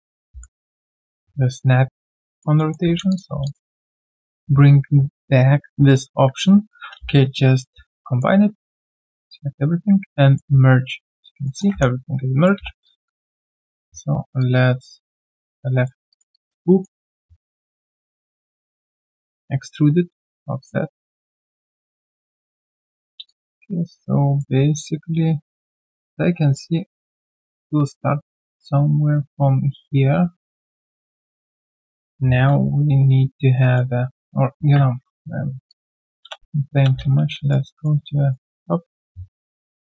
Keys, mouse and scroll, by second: 0.0-0.8 typing, 2.3 alt+click, 2.5 alt+middle click, 3.0 q, 3.1 shift+click, 3.6 alt+right click, 3.7 alt+click, 3.9 alt+right click, 4.0 alt+middle click, 5.9 alt+middle click, 6.7 ctrl+alt+c, 6.9 q, 7.2 right click, 7.7 scroll down 1, 8.4 alt+right click, 11.4 alt+middle click, 11.7 3, 12.1 right click, 12.7 q, 12.8 alt+click, 13.0 alt+click, 13.1 right click, 15.9 Tab, 16.1 alt+right click, 16.3 alt+click, 16.6 alt+middle click, 17.0 alt+right click, 23.2 alt+click, 25.6 middle click, 32.4 g, 33.5 alt+middle click, 34.4 ctrl+z, 34.8 ctrl+z, 35.7 alt+click, 36.3 space, 37.0 f, 37.4 alt+right click, 37.6 alt+middle click, 37.9 alt+right click, 38.3 alt+middle click.